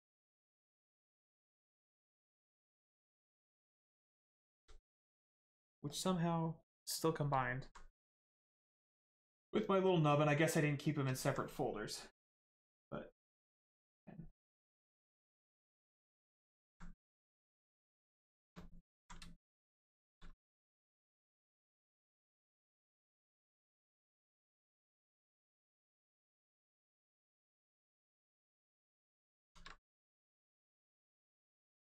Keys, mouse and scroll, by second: 1.8 click, 2.5 right click, 3.4 click, 3.9 right click, 4.3 shift+right click, 4.6 alt+right click, 5.0 right click, 5.0 right click, 7.4 alt+right click, 8.2 right click, 8.2 right click, 12.3 click, 14.8 click, 16.2 alt+right click, 17.3 right click, 17.4 right click, 18.3 shift+right click, 18.6 alt+right click, 19.0 ctrl+right click, 26.3 right click, 26.7 shift+right click, 29.8 shift+right click, 29.8 right click, 31.0 click.